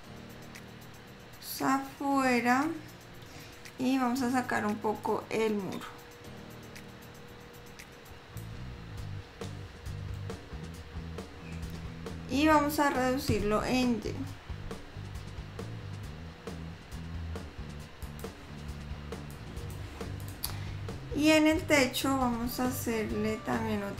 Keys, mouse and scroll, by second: 0.5-1.3 scroll down 3, 1.7 scroll down 1, 1.9 middle click, 3.9 scroll up 1, 5.3 click, 10.6 middle click, 11.6 l, 13.6 s, 19.4 click, 20.4 click, 22.5 middle click.